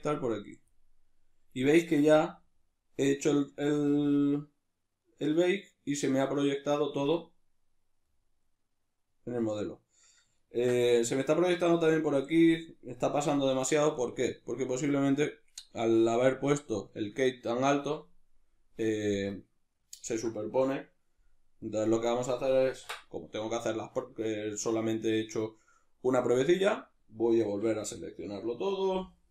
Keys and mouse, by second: 2.1-21.7 middle drag, 21.7 click, 23.1 \, 24.4 z.